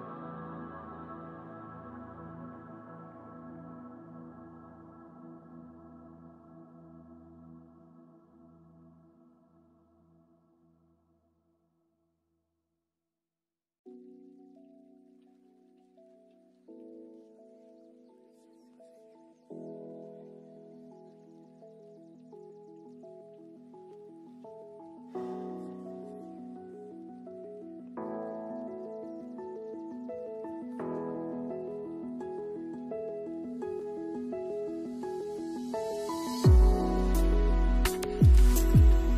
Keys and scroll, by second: 18.2 space, 21.0 space, 23.2 space, 31.0 space, 32.2 space.